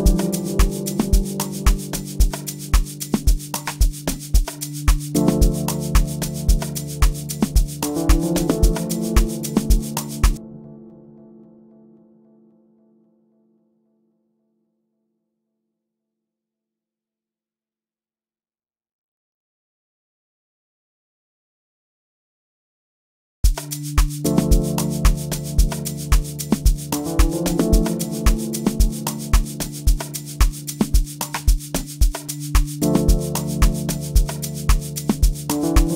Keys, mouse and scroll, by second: 30.5-35.9 drag.